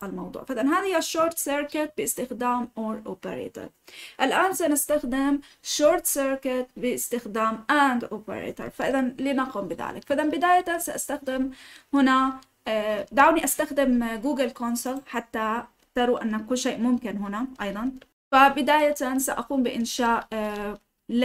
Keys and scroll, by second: 14.7 typing.